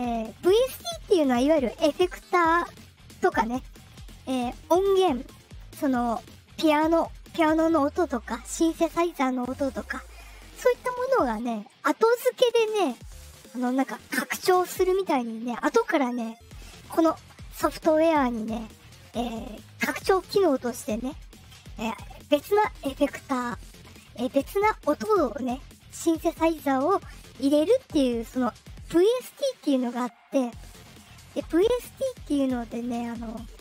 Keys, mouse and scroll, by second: 32.7 click.